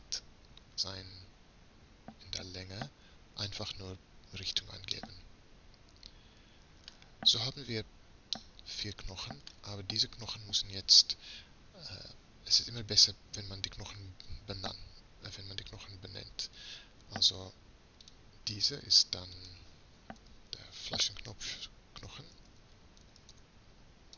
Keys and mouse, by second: 5.0-6.8 middle drag, 8.4-10.1 middle drag, 10.1 click, 12.9 right click, 13.3-14.6 drag, 18.0-20.8 drag.